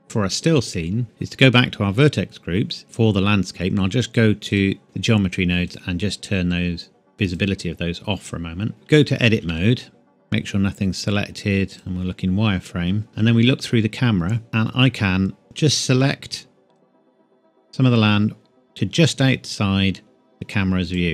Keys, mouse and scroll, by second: 0.0 scroll down 1, 1.0 click, 4.5 click, 8.7 Tab, 9.3 a, 9.5 a, 11.7 click, 13.1 KP_0, 14.5 scroll down 1, 16.7 click.